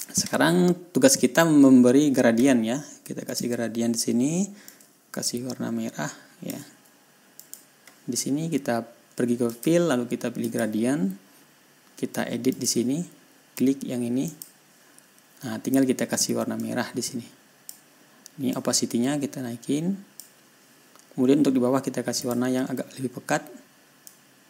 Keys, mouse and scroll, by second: 0.3 click, 3.7 click, 5.1-7.1 drag, 7.8 click, 9.9 click, 10.9 click, 13.0 click, 14.7 click, 17.0-18.3 drag, 19.0-20.8 drag, 22.7 click.